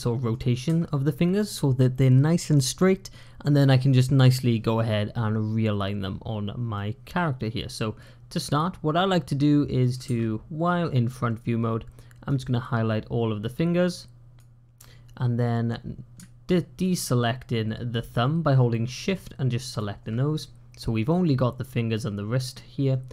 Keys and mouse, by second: 6.6-8.3 middle drag, 9.7 middle click, 12.1-14.2 drag.